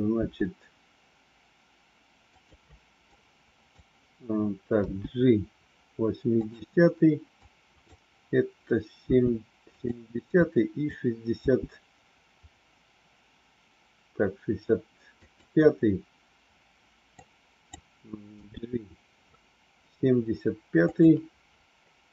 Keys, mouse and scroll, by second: 0.2 g, 3.0 click, 4.8 g, 7.3 click, 9.0 g, 10.4 click, 11.4 g, 17.0 click, 18.3 g.